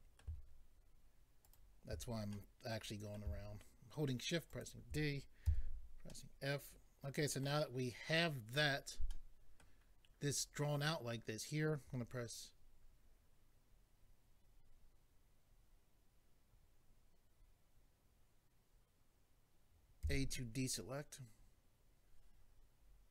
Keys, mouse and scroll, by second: 1.4 ctrl+right click, 2.3 middle click, 4.5 shift+click, 5.4 f, 6.1 middle click, 9.1 middle click, 20.0 a.